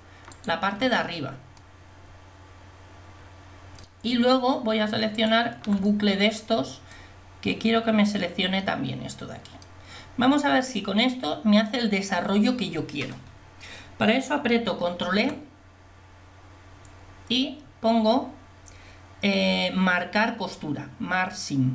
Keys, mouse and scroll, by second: 5.2-6.6 middle drag, 15.1 ctrl+e.